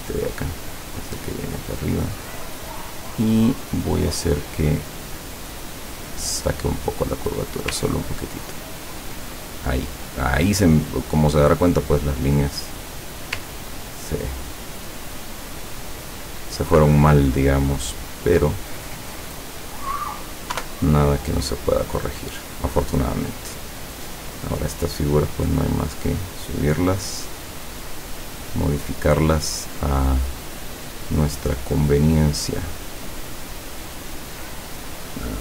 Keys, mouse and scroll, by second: 0.0-2.6 drag, 3.9-4.4 scroll down 2, 5.1-7.8 drag, 7.8-8.6 ctrl+scroll down 1, 11.7 click, 12.5-13.0 scroll up 2, 13.0-13.4 scroll down 2, 13.7-14.2 ctrl+scroll up 2, 14.6 ctrl+click, 15.9-18.2 drag, 18.6 click, 19.8 click, 20.6 Delete, 21.2-23.1 drag, 23.4-23.8 scroll down 2, 24.3 click, 25.4 click, 27.3 click, 30.7 middle click, 31.7-32.0 scroll down 1, 33.3 click, 34.9 click.